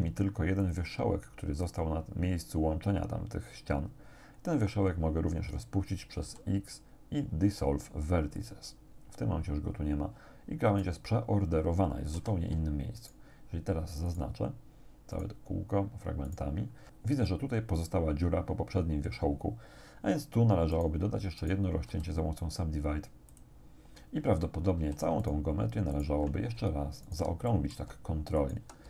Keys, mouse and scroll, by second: 0.6 click, 1.7 right click, 6.2 x, 8.4 click, 10.7 right click, 12.2 a, 13.0 alt+shift+right click, 14.1 alt+shift+right click, 15.2 alt+shift+right click, 16.3 alt+shift+right click, 20.8 shift+right click, 21.4 shift+right click, 21.9 shift+w, 23.4 middle click, 24.8 a, 25.2 alt+shift+right click, 26.0 alt+shift+right click, 27.1 alt+shift+right click, 27.5 alt+shift+middle click, 27.7 alt+shift+click, 28.4 alt+shift+right click.